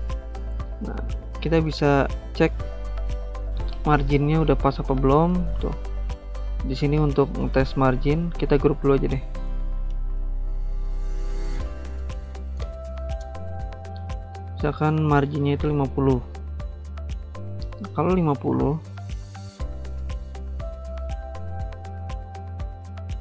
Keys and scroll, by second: 8.2 ctrl+g, 9.9 ctrl+z, 15.1-16.1 typing, 18.2 ctrl+g.